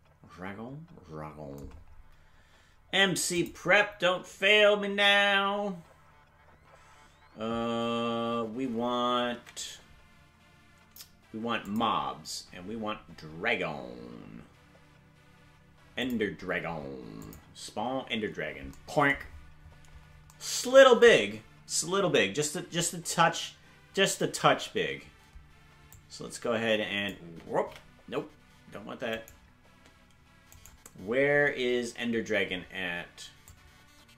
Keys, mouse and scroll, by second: 3.3 click, 11.6 click, 12.4-14.3 scroll down 1, 14.3-16.0 scroll down 5, 16.0 click, 17.2-18.2 drag, 19.2-20.5 scroll down 16, 25.9-27.1 drag, 28.1 ctrl+z, 29.2 right click, 31.0 right click, 32.5-33.4 scroll up 2, 33.4-34.1 drag, 33.4-34.1 scroll up 2.